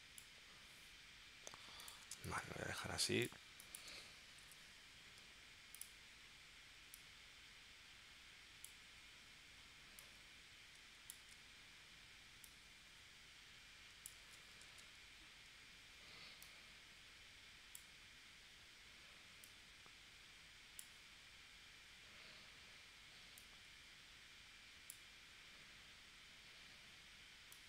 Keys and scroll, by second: 2.1 space, 4.4 p, 11.2 super+z, 14.2 super+z, 14.7 super+z.